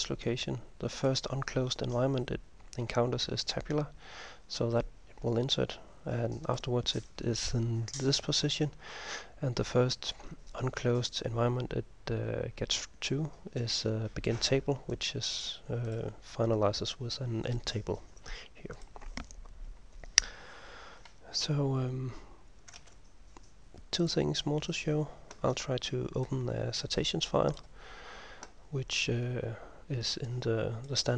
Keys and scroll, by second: 22.8 ctrl+s.